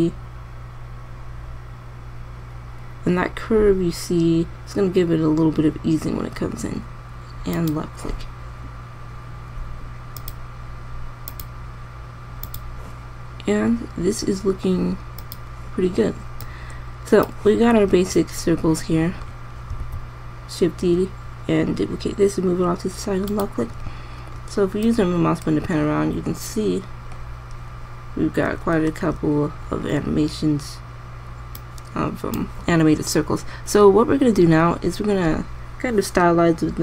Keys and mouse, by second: 10.7 click, 20.4 shift+d, 29.4 KP_0.